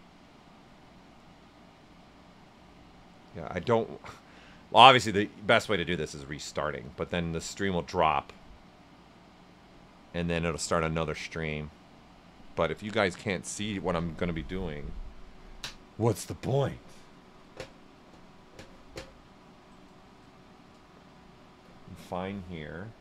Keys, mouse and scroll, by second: 19.8 click, 20.2-23.0 right drag, 20.2 typing.